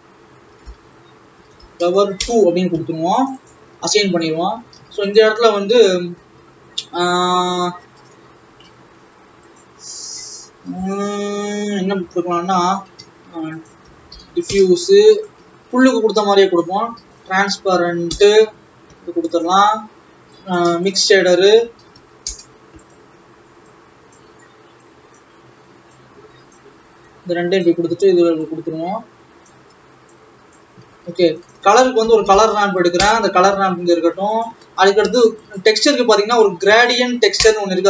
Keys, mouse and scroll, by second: 2.2 e, 3.3 click, 4.5 ctrl+s, 4.8 alt+a, 5.3 shift+a, 9.6 click, 10.1 scroll up 3, 12.6 Delete, 13.3 shift+a, 14.8 f, 20.4 click, 20.9 shift+a, 23.8-26.6 drag, 27.1-29.7 drag, 30.3-31.4 drag, 33.1 shift+a, 35.6 middle click, 35.7 shift+a.